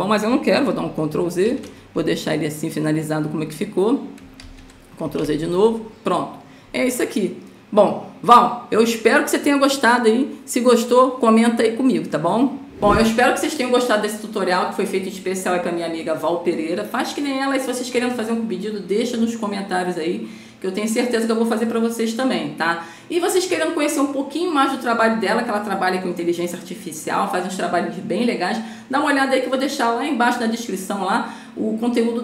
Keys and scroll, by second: 1.1 ctrl+z, 4.7 ctrl+z, 5.5 ctrl+z.